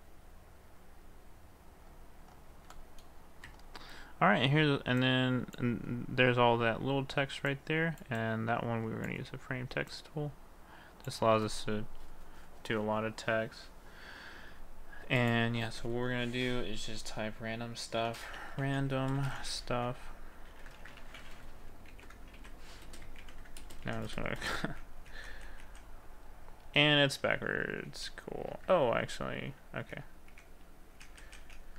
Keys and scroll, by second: 18.0 shift+r, 18.6 d, 19.0 m, 21.0 a, 22.0 c, 23.3 ctrl+v, 23.9 ctrl+v, 24.4 ctrl+v, 24.7 ctrl+v, 25.0 ctrl+v, 25.3 ctrl+v, 30.4 ctrl+v, 31.0 ctrl+v.